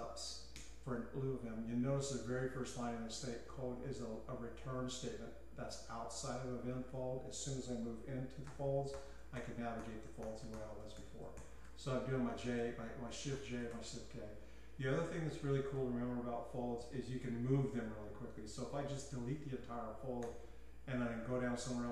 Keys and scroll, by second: 0.8 Return, 6.9 typing, 8.0-14.2 typing, 15.3-16.0 typing, 20.2-21.9 typing.